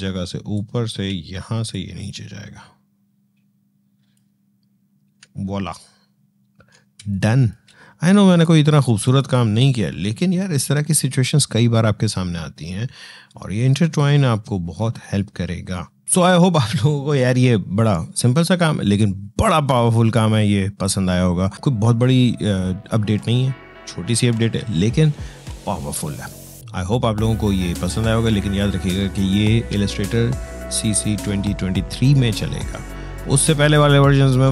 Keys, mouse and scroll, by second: 0.4 click, 0.5 space, 1.5-5.2 drag, 5.2-5.8 scroll down 2, 6.8 space, 6.9 click, 7.3 space, 8.0 click, 10.2 Tab, 16.0-22.0 drag.